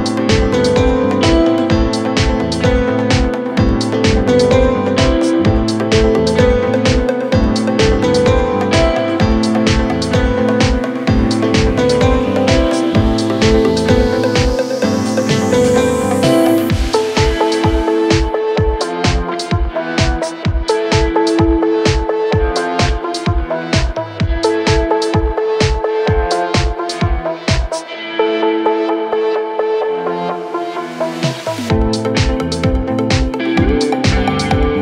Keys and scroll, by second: 9.4 ctrl+Page_Down, 32.3 ctrl+z.